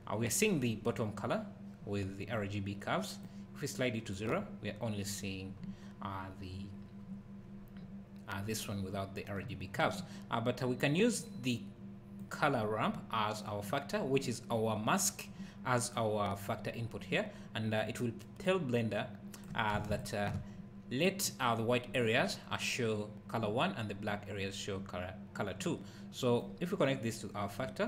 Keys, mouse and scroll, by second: 3.2 click, 9.5 `, 12.2 click, 18.4 click, 19.9 ctrl+shift+click, 26.4 click.